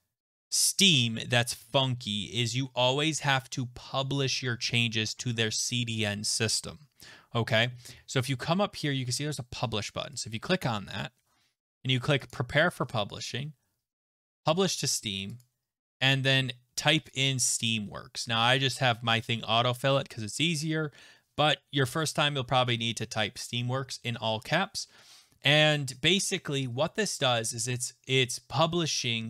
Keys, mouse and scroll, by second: 10.2 click, 12.3 click, 15.0 click, 15.4 click, 16.1 click, 17.7 click, 22.1 click.